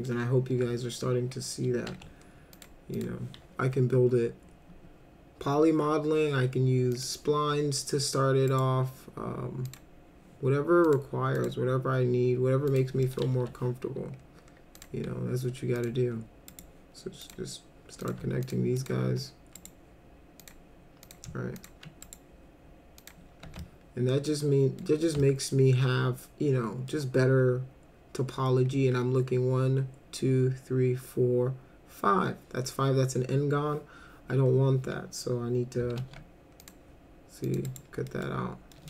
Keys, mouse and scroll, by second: 0.5 2, 1.9 w, 2.5 click, 2.9 click, 6.9 click, 8.5 right click, 9.6 click, 10.9 click, 11.4 click, 12.7 click, 13.0 middle click, 13.4 1, 14.8 click, 15.8 ctrl+click, 16.5 right click, 17.2 click, 18.0 click, 18.4 ctrl+click, 18.8 ctrl+click, 19.6 right click, 20.4 click, 21.0 click, 21.6 ctrl+click, 22.0 right click, 23.0 click, 23.6-24.8 alt+middle drag, 25.2-26.9 alt+middle drag, 36.0 alt+c, 36.6 click, 37.4 click, 37.7 right click, 38.1 middle click, 38.7 middle click.